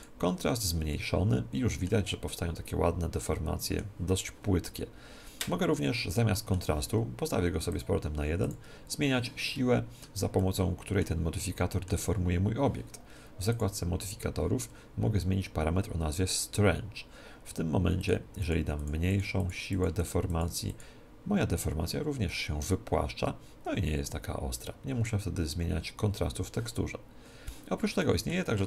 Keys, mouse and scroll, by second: 1.7-4.1 middle drag, 5.3-7.6 middle drag, 7.6-9.5 drag, 9.5-13.2 middle drag, 13.5-15.3 drag, 18.0-22.5 drag, 22.2-24.1 middle drag, 27.9-28.6 middle drag.